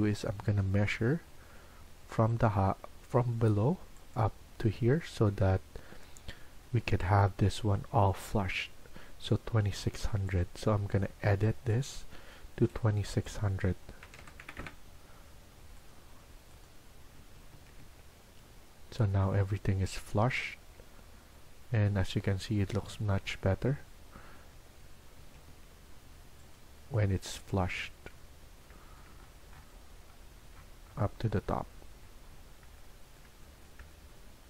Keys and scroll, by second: 9.5 Escape, 9.7 Escape, 13.7-14.9 typing, 17.1 Escape, 17.4 Escape, 17.7 Escape, 25.1 Escape, 25.4 Escape.